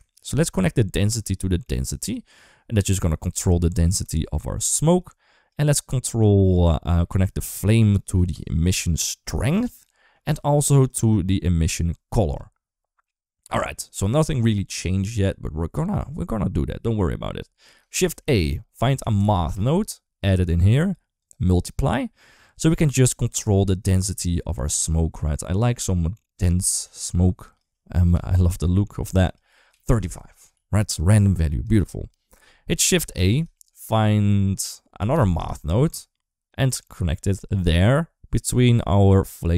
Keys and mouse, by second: 0.1 ctrl+z, 0.6 middle click, 1.2 click, 1.3 click, 2.9 shift+middle click, 3.9 shift+middle click, 4.8 click, 6.4-9.2 drag, 9.6 middle click, 10.8-12.2 drag, 15.2 middle click, 17.8 shift+a, 20.6 g, 21.0-22.2 drag, 23.1-27.4 drag, 28.4 ctrl+s, 29.0 click, 30.4 ctrl+s, 31.0 click, 33.0 shift+a, 38.4 middle click.